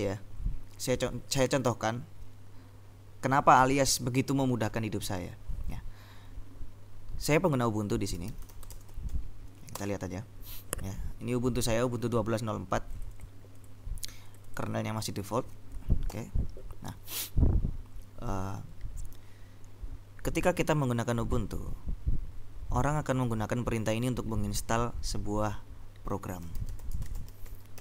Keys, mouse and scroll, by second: 8.0-9.7 typing, 9.8 Return, 13.1-15.9 drag, 16.2 ctrl+l, 26.2-27.8 typing.